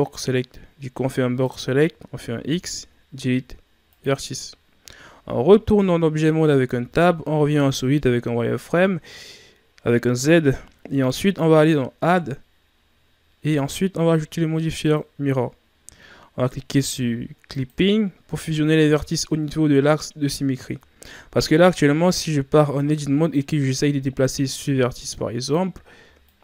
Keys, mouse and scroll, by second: 2.4 x, 6.3 Tab, 6.6 z, 7.9-10.2 ctrl+scroll up 5, 17.5 click, 18.8-19.3 ctrl+scroll down 2, 19.3-21.4 scroll up 2, 22.2 Tab, 23.2 right click, 23.7 scroll up 1, 25.4-26.4 drag.